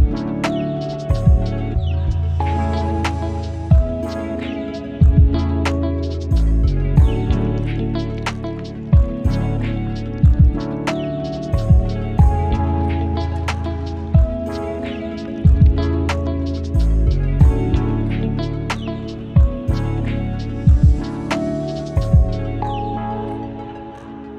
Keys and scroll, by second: 4.5 ctrl+l.